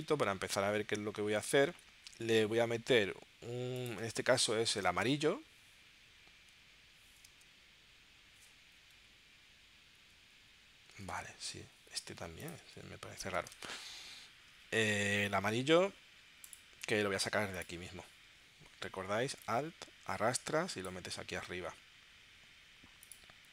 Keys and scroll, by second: 2.1 super+Tab, 4.0 space, 4.8 space, 7.3 space, 8.9 Down, 9.6 Down, 11.0 space, 12.6 space, 13.5 super+Tab.